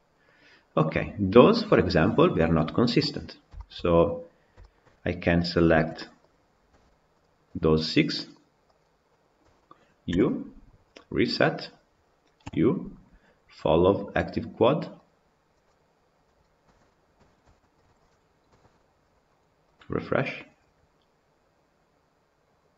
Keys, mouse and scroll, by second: 2.7-3.4 scroll down 7, 3.4-3.9 shift+middle drag, 3.9-4.5 scroll down 2, 4.5 shift+middle drag, 4.7 scroll up 2, 5.3 click, 5.7 Tab, 6.1 click, 7.0 shift+click, 7.3 shift+click, 7.7-8.7 shift+drag, 11.5 u, 16.6 Tab, 16.8 scroll down 3, 17.1-17.7 shift+middle drag, 17.7 click, 18.4 KP_Decimal.